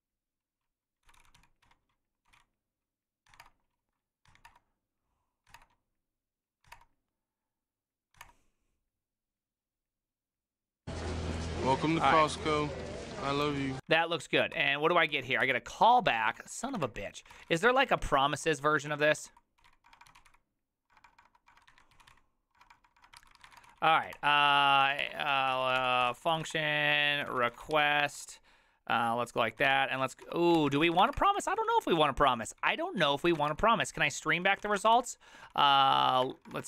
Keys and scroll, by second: 3.3 Tab, 3.3 typing, 3.4 Return, 4.3 Tab, 4.5 Return, 5.5 Tab, 5.5 typing, 6.7 typing, 11.8-14.0 typing, 14.1 ctrl+c, 14.5 ctrl+c, 15.1 ctrl+w, 15.4-36.6 typing, 23.2 ctrl+c, 36.5 Return.